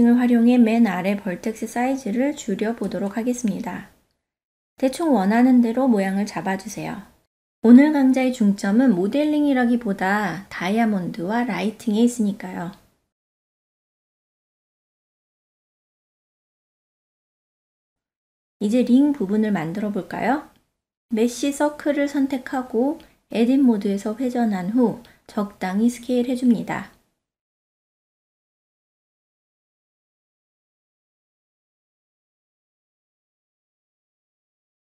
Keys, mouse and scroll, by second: 1.1 click, 3.2 ctrl+a, 12.8 click, 13.6 click, 15.0 ctrl+a, 15.0 click, 15.1 ctrl+a, 15.3 middle click, 15.6 KP_3, 15.9 click, 16.5 click, 16.8 ctrl+alt+z, 16.8 ctrl+middle click, 17.6 Tab, 19.6 click, 20.0 shift+a, 24.3-24.9 shift+middle drag, 25.2 Tab, 25.6 a, 25.9 r, 26.7 click, 26.9-28.3 drag, 28.5 KP_Enter, 29.7 KP_1, 30.2 ctrl+middle click, 31.0 Tab, 31.5-33.2 drag, 33.6 Tab, 34.2 s, 34.5 click, 34.7-34.9 drag.